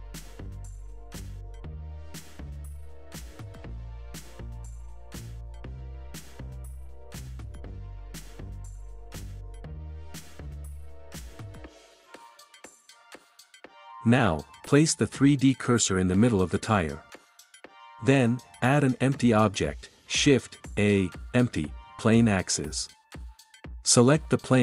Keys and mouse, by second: 1.2 ctrl+s, 4.7 middle drag, 11.9 click, 17.1 shift+a, 21.2 click, 23.6-24.6 right drag.